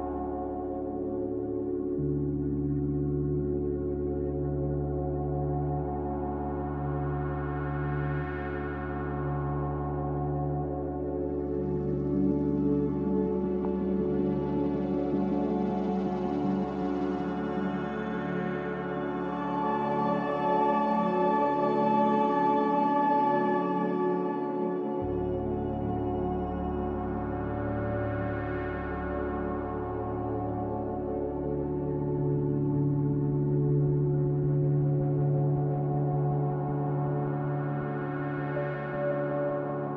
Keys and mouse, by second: 1.7-3.8 drag, 4.2 ctrl+z, 5.2 shift+click, 5.7-6.4 drag, 7.5 m, 14.5 ctrl+z, 14.9 ctrl+z, 15.3 ctrl+z, 16.3 ctrl+z, 16.6 ctrl+z, 17.8 1, 20.0 click, 22.1 m, 24.3-26.0 middle drag, 26.6-27.1 shift+middle drag, 27.9 click, 28.7 shift+click, 30.5 m, 33.8 shift+click, 36.1 m, 37.8-38.3 middle drag, 39.6 shift+click.